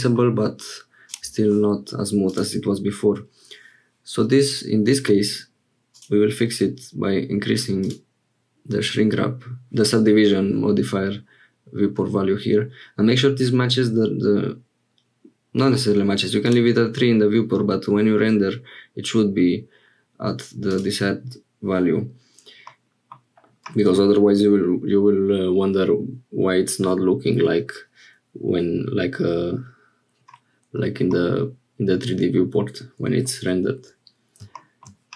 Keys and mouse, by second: 1.0 click, 2.3 click, 5.9 click, 20.7 click, 22.7 middle click, 31.2-32.4 middle drag.